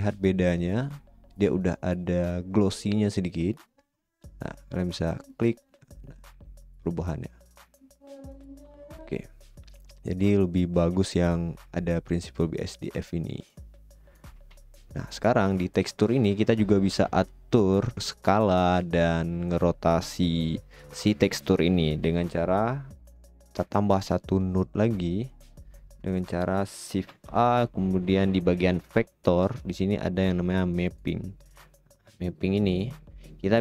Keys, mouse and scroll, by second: 2.1 middle click, 8.6 right click, 12.6 click, 13.7 click.